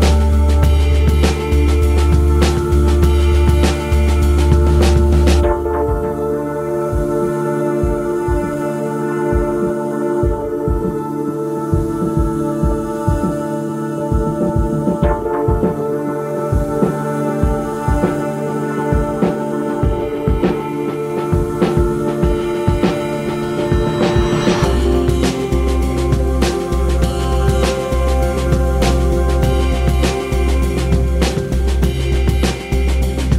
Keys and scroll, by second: 8.9 z, 12.9 z, 26.9 space, 28.7 KP_3, 29.8 z, 31.3 z.